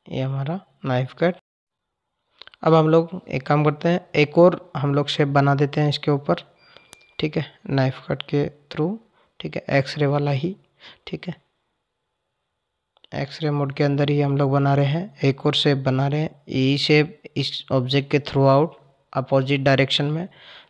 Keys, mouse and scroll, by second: 1.4 click, 3.5 click, 7.2-10.3 drag.